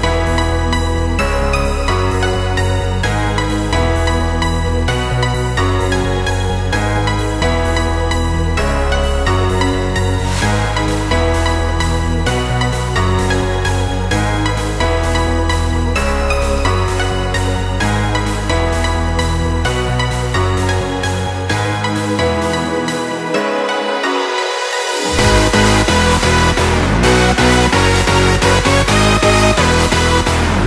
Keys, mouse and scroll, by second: 1.2 click, 3.1 ctrl+a, 3.6 ctrl+c, 4.0 click, 5.0 ctrl+v, 5.8 click, 8.7 ctrl+t, 9.3-11.1 drag, 11.1 Return, 11.8 Down, 14.6 click, 19.1 click, 24.7 click, 27.0 ctrl+c, 27.3 click, 28.3 ctrl+v, 29.7-30.6 drag.